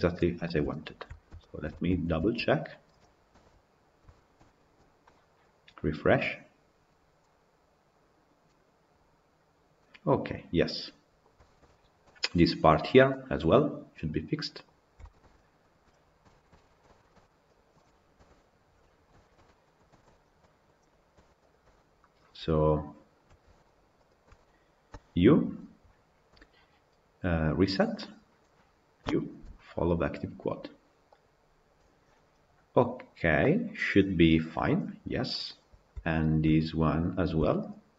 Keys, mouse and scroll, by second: 2.2 Tab, 2.4 click, 3.2 KP_Decimal, 3.9-4.5 shift+middle drag, 4.5 scroll up 1, 9.7-14.6 middle drag, 14.6 scroll down 2, 14.8-15.6 shift+middle drag, 15.6-16.0 scroll down 5, 16.1-17.4 shift+middle drag, 17.4 click, 18.0 KP_Decimal, 18.6-19.9 middle drag, 19.9 Tab, 20.2-21.4 middle drag, 21.4 alt+click, 23.8 shift+click, 31.2 u, 35.1-36.2 middle drag, 36.2 alt+click, 36.7 click.